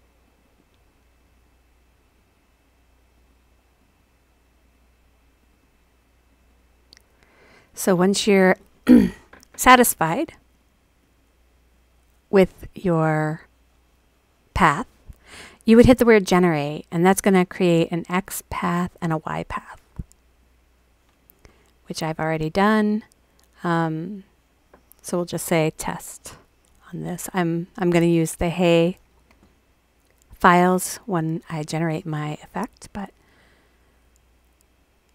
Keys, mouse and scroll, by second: 0.2 click, 0.4 click, 1.2 click, 1.3 click, 2.1 click, 2.3 click, 3.1 click, 3.3 click, 3.8 click, 4.0 click, 4.5 click, 4.7 click, 5.4 click, 5.6 click, 6.3 click, 6.5 click, 7.5 click, 7.7 click, 10.4 click, 10.6 click, 11.0 click, 15.7-19.8 scroll up 2, 19.8-20.3 scroll up 1, 20.3 click, 20.5-24.0 scroll up 1, 24.0 click, 24.0-28.2 scroll up 1, 28.2-32.3 scroll up 1, 32.3-33.7 scroll up 1, 33.7 click.